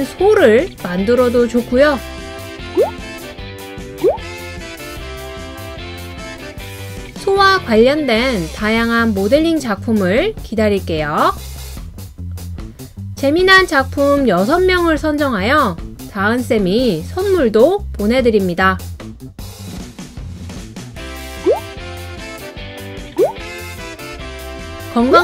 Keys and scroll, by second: 0.0 Up, 0.2 Up, 0.3 Up, 0.4 Up, 0.5 Up, 1.6 Right, 1.7 Right, 2.7 Right, 2.7 Up, 12.2 Right.